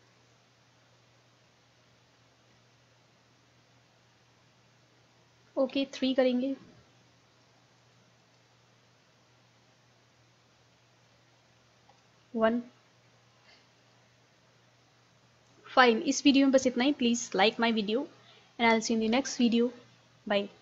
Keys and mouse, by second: 2.9-4.8 middle drag, 5.7 KP_3, 7.1 middle click, 7.9-9.8 drag, 9.8 middle click, 11.9 KP_1, 13.3-15.2 drag, 15.2-19.0 middle drag.